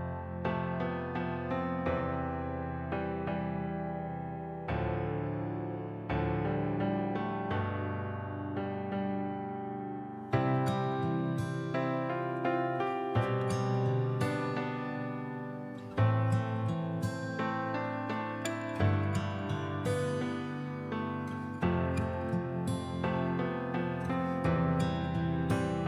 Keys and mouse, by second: 1.2 drag, 2.5 right click, 3.2-3.6 middle drag, 3.6 click, 4.3 middle click, 4.8 click, 4.9 right click, 5.5 r, 6.7-7.2 drag, 9.9 r, 11.1 click, 12.0 r, 14.3 drag, 14.7 click, 15.8 click, 16.7 alt+click, 17.4 alt+click, 18.0-19.1 drag, 19.2-19.9 alt+drag, 20.6 click, 20.9 click, 21.9 drag, 22.3 click, 23.0 n, 23.8 click, 25.2 click, 25.6 click.